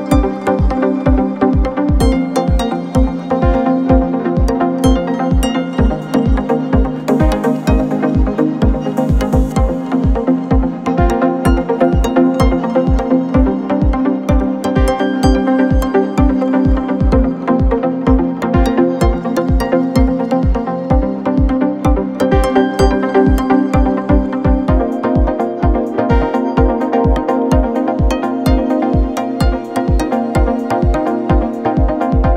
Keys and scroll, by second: 4.1 v, 24.5 ctrl+z, 28.2 KP_3.